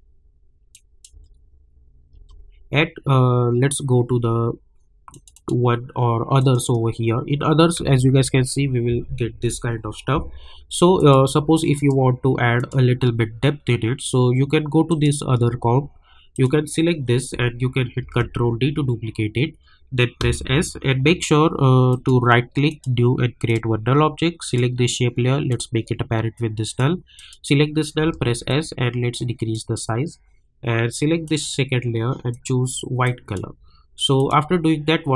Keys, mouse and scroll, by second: 1.1 space, 5.1 click, 7.7 space, 9.5 k, 11.0 click, 14.9 click, 18.0 ctrl+d, 20.2 s, 21.9 right click, 22.7-27.1 drag, 28.0 s, 28.5-31.2 drag.